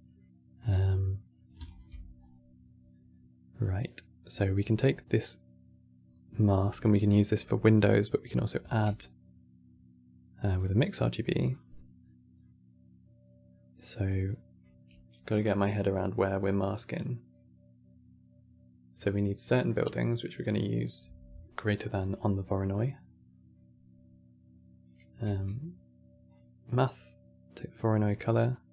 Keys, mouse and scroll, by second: 1.4 ctrl+shift+click, 1.9 scroll up 2, 3.7-6.3 middle drag, 6.3 scroll up 1, 6.6-8.3 shift+middle drag, 8.3 q, 11.7-12.1 scroll up 3, 12.1-13.8 middle drag, 13.8 click, 21.5 scroll down 3, 21.6-24.9 middle drag, 24.9 q, 28.1 click.